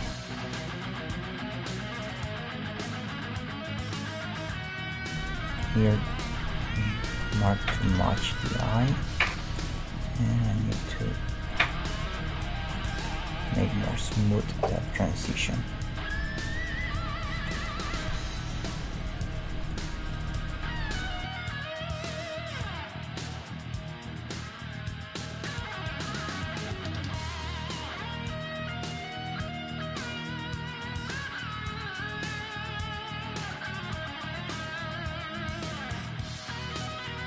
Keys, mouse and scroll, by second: 0.2 \, 0.7-2.1 middle drag, 1.5 Tab, 4.7 Tab, 5.2 \, 5.9 click, 6.5 Tab, 8.1 g, 9.1-16.7 middle drag, 9.1 right click, 9.6-12.3 right drag, 17.7-19.2 middle drag, 18.7 right click, 21.2 \, 22.5 g, 24.8-30.7 middle drag, 29.6-31.9 right drag, 32.2-33.9 middle drag, 33.6 g, 34.9 g, 36.2 middle click, 36.9-37.2 right drag.